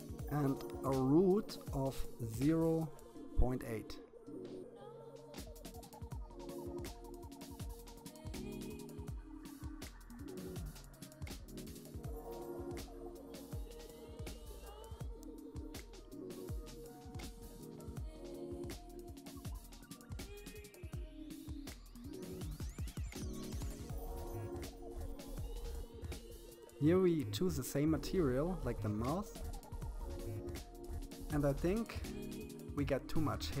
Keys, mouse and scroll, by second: 3.7-5.4 drag, 10.7-12.0 scroll up 5, 12.0 middle click, 12.8 scroll down 1, 12.9-13.2 scroll up 5, 13.3 middle click, 14.2-15.4 middle drag, 15.4-16.6 scroll up 3, 16.6-18.4 scroll up 9, 18.4 scroll up 2, 21.5-23.1 drag, 26.6-28.8 drag, 30.6 KP_3, 31.6 shift+middle click, 32.6-33.6 scroll up 8.